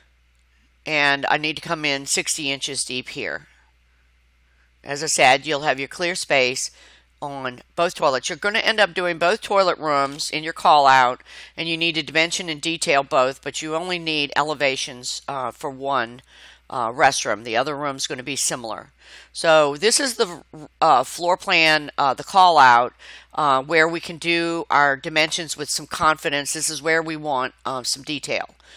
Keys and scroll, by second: 2.0 5, 2.8 BackSpace, 3.4 6, 4.5 shift+', 4.9 Return, 9.2 Escape, 13.6 Escape, 15.0 Escape, 17.6 Tab, 23.7 Escape.